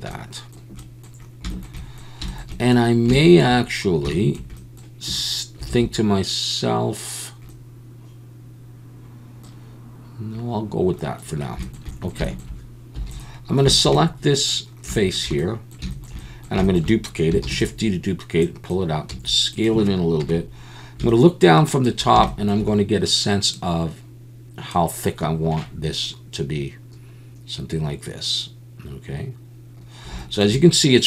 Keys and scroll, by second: 5.7 alt+a, 13.0 3, 17.4 shift+d, 19.1 s, 20.2 KP_7.